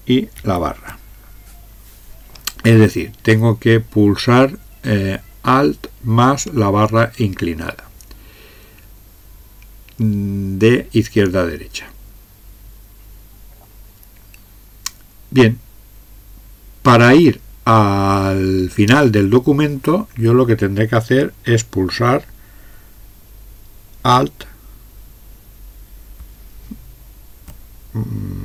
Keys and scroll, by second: 0.4 alt+\.